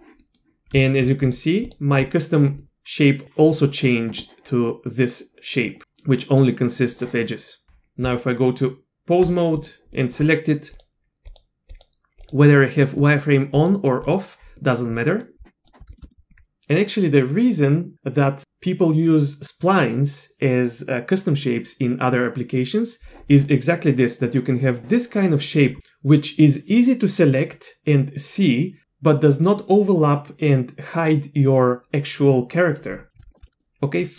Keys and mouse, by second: 0.2 click, 0.8 shift+click, 1.7 click, 2.0-2.4 middle drag, 2.6-3.2 drag, 4.7 click, 5.8 click, 7.6 Tab, 8.0 Tab, 10.0 middle click, 10.7 click, 11.3 click, 11.7 click, 12.2 click, 13.5 click, 14.0 click, 14.6 click, 15.0 click, 15.6-16.0 shift+drag, 23.5 click, 25.4 middle click, 33.3 shift+middle click, 33.4 middle click.